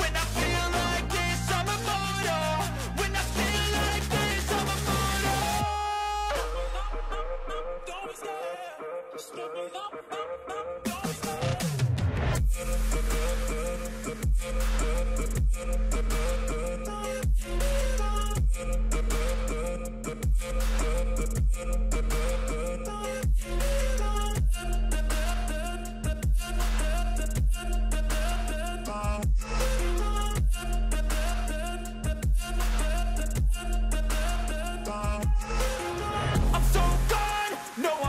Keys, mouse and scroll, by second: 0.8-2.1 [, 5.8-6.9 typing.